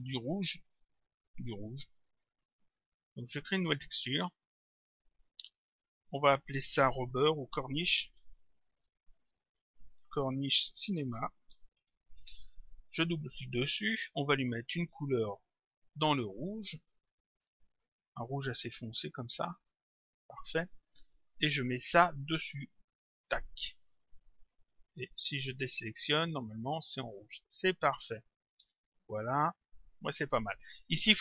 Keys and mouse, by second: 3.4 click, 6.0 click, 8.2-12.0 typing, 13.0 click, 14.6 click, 18.4 click, 19.6 click, 21.0 click, 22.2 click, 25.5 click, 27.8 click.